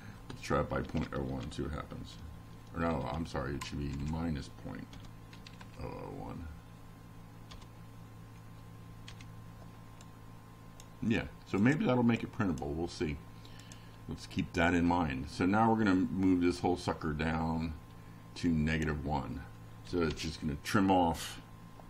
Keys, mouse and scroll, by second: 0.0 click, 0.7-4.3 drag, 8.1 F5, 8.8-9.7 drag, 11.1 scroll up 2, 18.5 click.